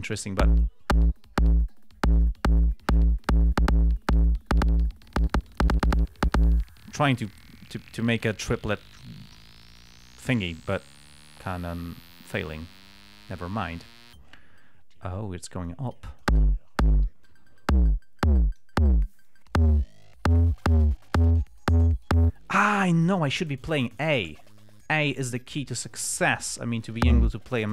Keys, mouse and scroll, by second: 0.0-0.7 drag, 12.4 click, 16.0 click, 17.6-19.1 drag, 19.6-27.4 drag.